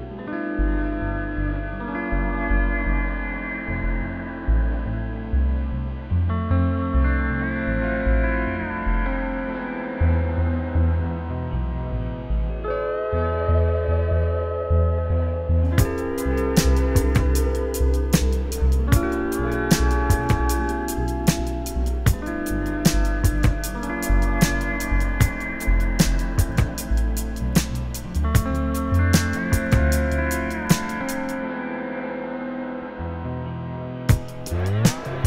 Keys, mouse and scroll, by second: 1.0 click, 1.9 e, 2.6 `, 3.6 scroll down 1, 3.8 KP_1, 4.6-6.1 scroll down 1, 6.1-10.8 ctrl+right drag, 6.4-7.0 scroll up 1, 7.0 Tab, 7.7 ctrl+r, 10.8 `, 11.7-12.2 scroll down 1, 12.2 1, 12.7 click, 12.8 `, 14.0 `, 14.7 alt+s, 15.1 right click, 15.5 g, 16.3 click, 16.5-16.9 scroll up 1, 16.9 click, 17.0 `, 17.4-18.1 scroll down 1, 18.2 `, 18.6 alt+s, 21.0-22.7 right drag, 21.7 a, 22.2 Tab, 22.7 click, 23.2 KP_Decimal, 23.5 scroll down 1, 23.9 `, 24.1 scroll down 1, 24.4 `, 24.9 scroll up 1, 25.1 `, 26.6 click, 26.8 `, 27.5 shift+click, 28.1 `, 28.7 g, 29.5 scroll down 1, 29.8 `, 30.0-30.6 scroll up 4, 30.6 `, 31.3 click, 31.6 alt+a, 31.8 scroll down 2, 32.0 `, 33.2 `.